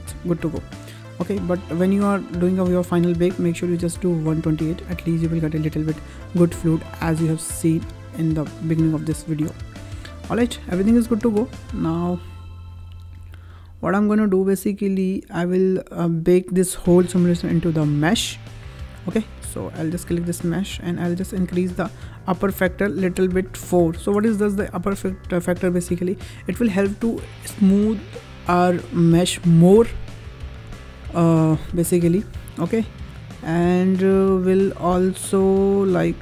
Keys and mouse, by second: 1.5 space, 8.6-9.9 drag, 20.0-24.2 drag.